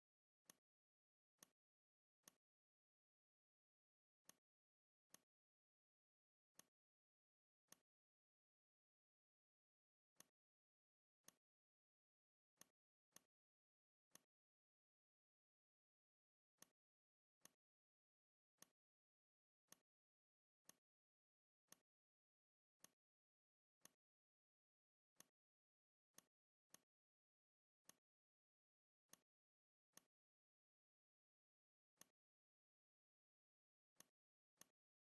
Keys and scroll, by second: 11.0 r, 12.0 v, 12.8 r, 13.6 v.